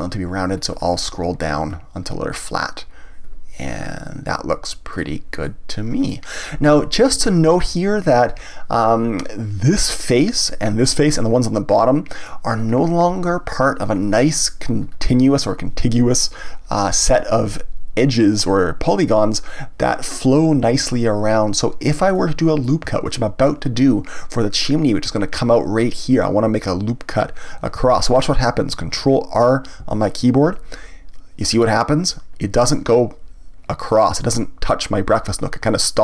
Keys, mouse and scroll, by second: 5.0 click, 5.4-10.7 middle drag, 11.1-12.7 middle drag, 12.7 scroll up 1, 14.8 scroll down 1, 22.1-26.1 middle drag, 29.8 ctrl+r.